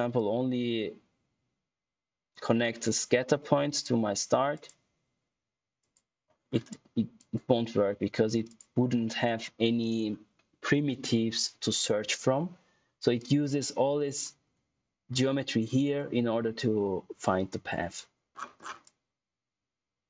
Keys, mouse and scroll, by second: 0.1 click, 6.4 scroll down 1, 6.6 click, 15.9-17.3 scroll down 1, 17.8 click, 18.2-18.8 scroll down 1, 18.8 click.